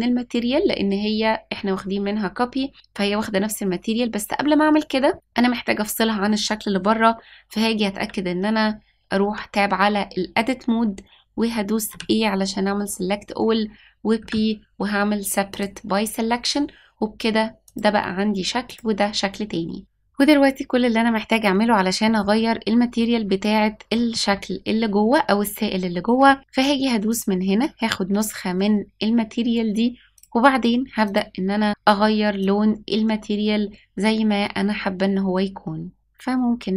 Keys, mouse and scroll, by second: 5.0 middle click, 7.9 p, 9.2 Tab, 11.9 a, 14.1 p, 17.6 click, 18.6 click, 22.0 middle click, 24.1 middle click, 27.0-28.6 drag, 30.1 click.